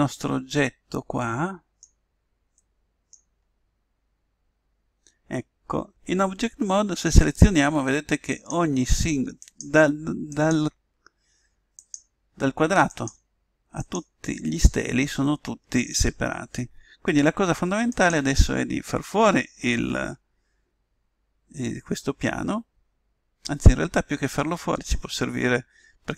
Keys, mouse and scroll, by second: 7.2-15.5 right drag, 17.9 right click, 19.8 x.